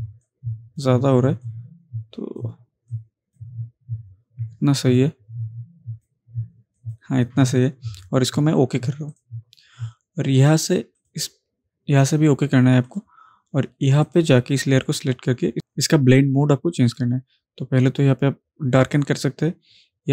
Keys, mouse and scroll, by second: 9.1 click, 16.9 click.